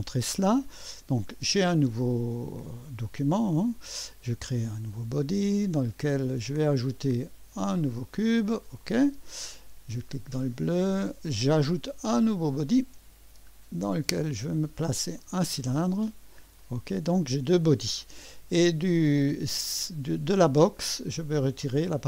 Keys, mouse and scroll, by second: 0.0 click, 4.9-7.7 drag, 8.8 click, 9.9 click, 12.3 drag, 14.1 click, 15.2 click, 16.6 click, 18.9 click.